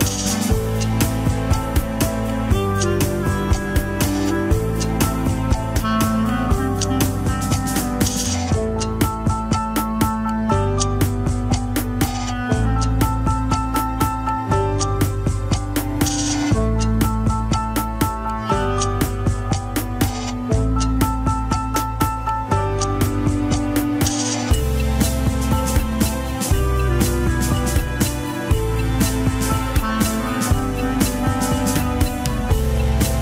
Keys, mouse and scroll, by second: 2.3-3.9 middle drag, 3.9 KP_3, 4.2 scroll down 2, 4.8 click, 5.5 r, 8.3 alt+r, 8.6 alt+g, 9.1 click, 9.9 r, 13.7 ctrl+Tab, 13.8 shift+click, 14.2 ctrl+Tab, 15.6 ctrl+click, 16.2 ctrl+click, 16.7-17.0 scroll up 1, 17.0 middle click, 17.6 alt+z, 17.8 middle click, 18.8 click, 19.0-19.6 scroll up 1, 19.6 click, 20.1 middle click, 20.6 click, 21.0 middle click, 21.6-23.3 scroll up 1, 23.7 click, 24.2 scroll down 3, 24.4-26.1 middle drag, 26.1 click, 26.8 middle click, 27.1-27.7 scroll up 1, 27.7 click, 28.4 alt+z, 29.6 ctrl+click, 30.3 alt+z, 31.7-32.7 drag, 32.7-33.2 middle drag.